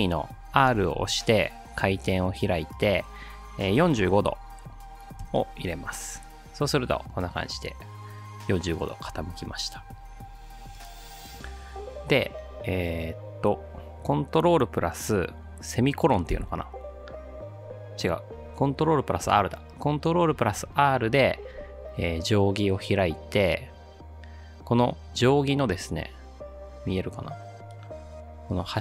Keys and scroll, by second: 3.8 4, 4.0 5, 5.2 Return, 16.4 ctrl+;, 20.4 ctrl+r.